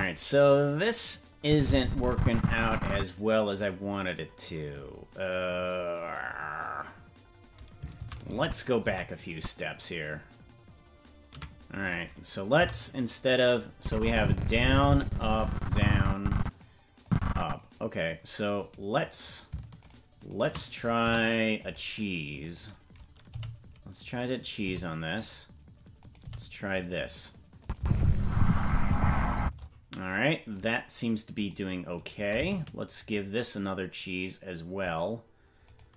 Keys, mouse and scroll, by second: 1.4-3.0 drag, 8.4 ctrl+z, 8.8 ctrl+z, 9.3 ctrl+z, 11.7 right click, 12.5 c, 13.8-16.6 drag, 17.0 click, 18.6-21.0 right drag, 21.0 Delete, 22.4 right click, 23.3 g, 24.6 g, 26.0 right click, 26.1 g, 27.6-28.6 drag, 27.7 space, 29.4 space, 31.3 right click, 33.0-35.1 shift+right drag.